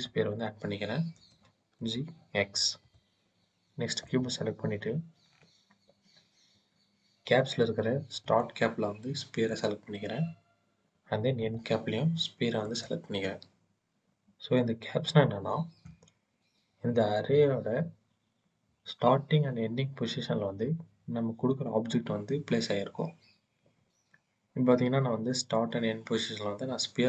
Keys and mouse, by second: 1.0 g, 1.6 x, 2.7-3.9 drag, 8.1-9.5 drag, 11.2-12.6 drag, 13.9 click.